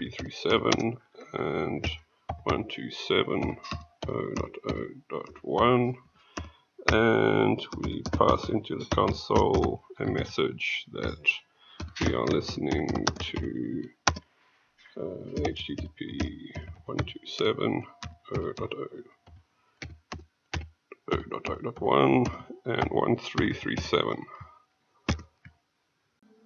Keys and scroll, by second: 25.0 ctrl+;, 26.2 Return.